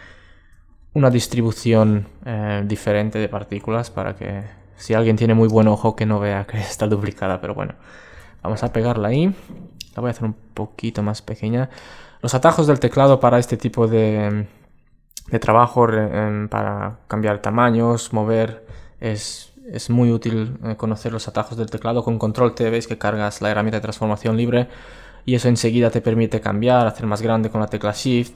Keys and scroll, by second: 3.9 super+c, 4.6 super+w, 8.0 super+v, 9.6 super+t, 22.8 super+t, 28.1 ⟲.